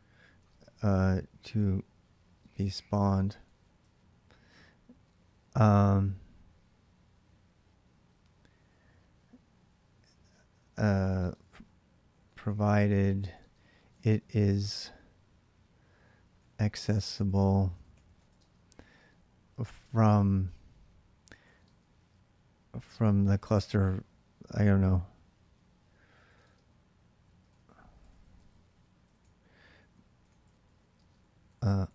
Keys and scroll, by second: 0.0-4.0 typing, 10.9-14.2 typing, 15.9-18.7 typing, 21.1-23.7 typing, 25.9-31.9 typing.